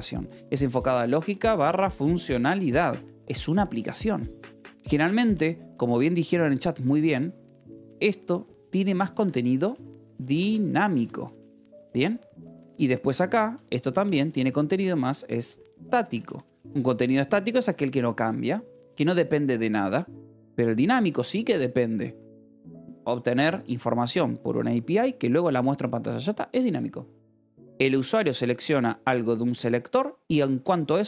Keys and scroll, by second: 0.5-2.9 typing, 4.6 o, 4.9 =, 5.1 space, 8.9-16.3 typing, 17.4 o, 17.5 Escape, 19.9 j, 21.3 shift+v, 21.8 Escape.